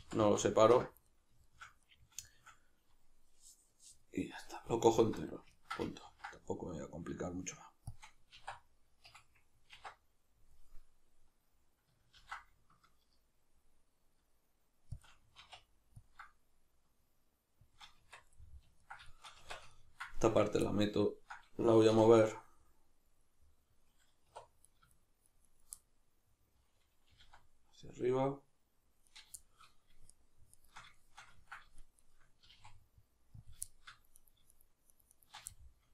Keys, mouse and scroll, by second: 4.8 alt+right click, 5.5-8.0 ctrl+middle drag, 6.1 ctrl+b, 8.0 shift+click, 8.4 alt+e, 9.1 Escape, 9.7 alt+e, 12.1 ctrl+b, 15.0 shift+click, 15.3 alt+e, 17.8 shift+click, 18.0 Tab, 18.4-20.4 middle drag, 19.4 Tab, 20.4 right click, 20.6-22.3 ctrl+middle drag, 21.9 3, 22.3 right click, 23.4-24.6 middle drag, 24.3 1, 24.6 right click, 24.9 shift+right click, 25.3 shift+right click, 25.4 shift+right click, 25.8-29.2 middle drag, 27.1 g, 29.2 right click, 29.4-30.1 shift+middle drag, 30.1 shift+right click, 30.6 shift+right drag, 31.0-31.8 shift+middle drag, 31.8 shift+right click, 32.0 shift+right drag, 32.4 g, 33.5 click, 33.7-34.2 shift+middle drag, 34.2 right click, 34.5 shift+right click, 34.9 shift+right click, 35.1 shift+right click, 35.5-35.9 shift+middle drag.